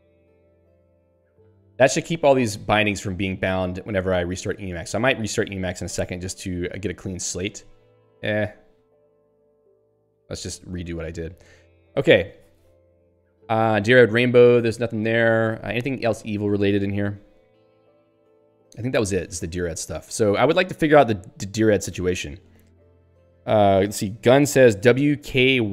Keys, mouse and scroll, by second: 4.7 click, 5.6 BackSpace, 6.2 Up, 6.5 Delete, 7.0 Up, 8.0 Down, 8.8 ;, 9.6 ctrl+/, 10.8 ctrl+s, 11.1 Down, 15.8-17.0 typing, 18.8 ctrl+g, 20.1 Up, 22.6 ctrl+s.